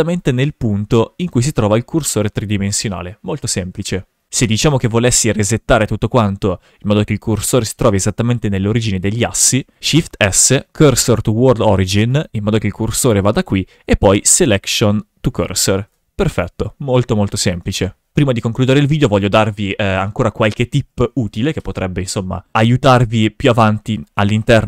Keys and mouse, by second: 0.6 shift+s, 1.4 shift+s, 9.5 shift+s, 13.6 shift+s, 14.5 shift+s, 15.7 shift+f, 24.1 click.